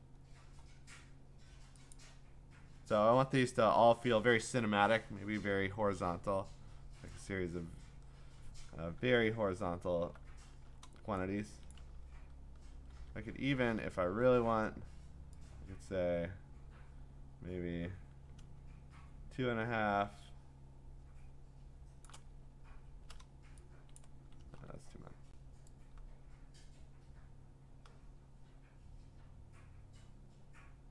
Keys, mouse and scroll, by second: 1.9 click, 7.3 click, 9.3-9.9 scroll, 10.8-11.2 scroll, 11.4-11.7 scroll, 11.7 click, 13.0 ctrl+d, 14.0-14.7 scroll, 19.6 scroll, 22.0 shift+click, 22.4-23.2 scroll, 24.4 ctrl+z.